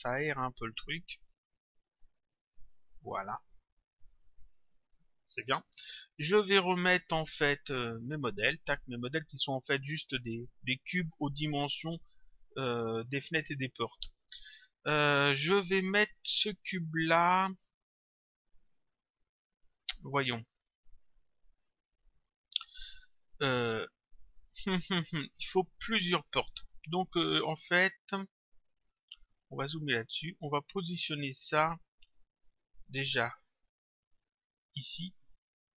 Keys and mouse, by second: 2.4 click, 4.3 click, 8.1 click, 10.2 click, 12.3 click, 13.6 click, 20.4 click, 30.1 click, 32.5 click, 34.1 click.